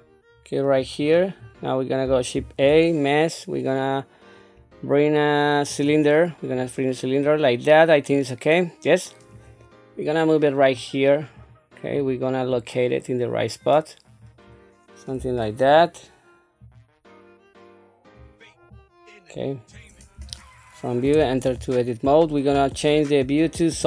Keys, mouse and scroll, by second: 0.9 scroll down 1, 2.3 shift+a, 9.3-10.7 drag, 11.4 click, 12.5-14.2 drag, 15.1 KP_3, 16.6-18.2 drag, 18.7-19.7 drag, 20.1 KP_1, 21.4 Tab, 22.5 z.